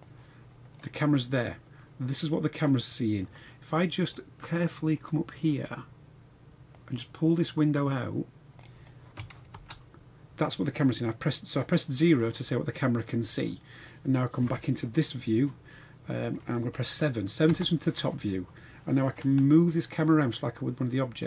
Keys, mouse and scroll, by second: 1.0 click, 1.8-3.2 middle drag, 6.7-8.6 drag, 9.5 KP_0, 17.5 KP_7.